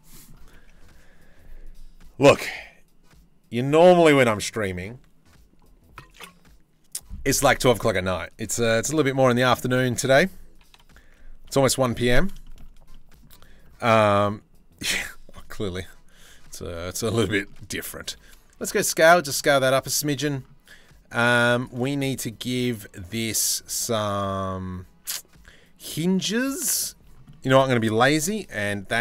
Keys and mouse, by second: 0.1 Tab, 7.0 click, 8.6 ctrl+l, 9.3 shift+middle click, 10.3 ctrl+l, 11.4 middle click, 11.6 middle click, 12.0 middle click, 12.5 middle click, 15.4 KP_3, 15.8 KP_1, 16.1 z, 17.6 s, 19.6 click, 20.9 z, 21.4 shift+middle click, 27.8 KP_3, 28.2 KP_1, 28.5 z.